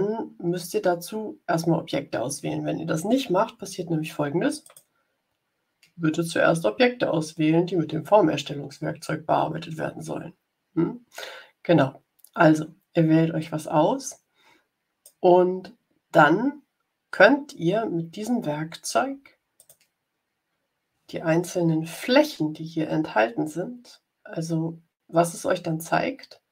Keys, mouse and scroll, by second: 4.5 click, 13.3-15.2 drag, 19.5 click, 25.9 ctrl+scroll up 2.